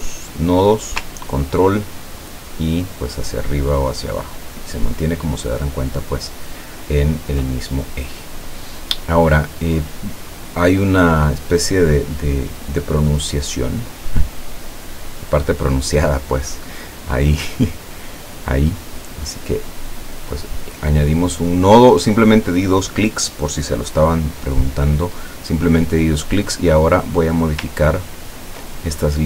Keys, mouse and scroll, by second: 1.9-7.3 ctrl+drag, 14.0 click, 17.4-21.6 drag, 27.9-28.4 ctrl+scroll up 2.